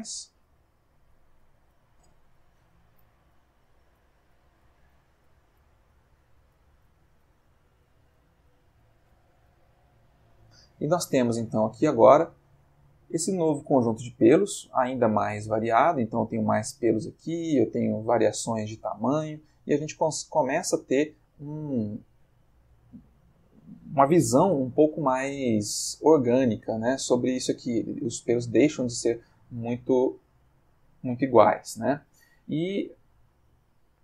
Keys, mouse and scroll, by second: 11.7-13.3 middle drag, 14.4 ctrl+middle click, 30.3 click, 32.8-34.0 ctrl+middle drag.